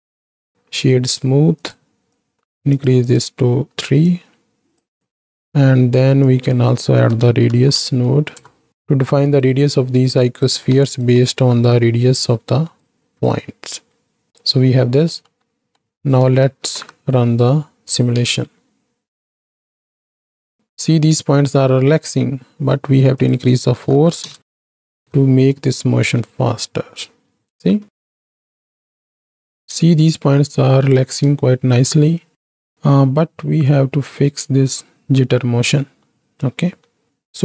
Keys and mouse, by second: 2.1 drag, 2.8-4.7 drag, 5.0 click, 6.4-8.7 drag, 9.6-10.4 right drag, 10.9 shift+right click, 11.2-12.9 right drag, 13.2-14.3 drag, 15.1 middle drag, 15.6 middle click, 16.6 shift+Right, 16.7 shift+Left, 18.2 space, 23.2-24.3 drag, 24.8 shift+Right, 25.0 shift+Left, 26.1 space, 27.8 shift+Left, 28.7 shift+Left, 29.5 space, 31.1 space, 33.6-37.1 drag, 37.3-37.4 drag.